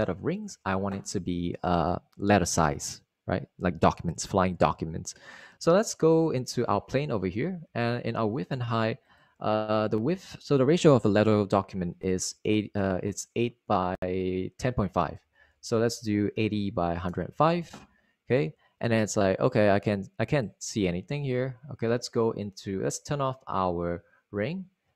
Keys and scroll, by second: 10.4 super+a, 12.6-13.6 typing, 15.9-17.0 typing, 18.0 Return.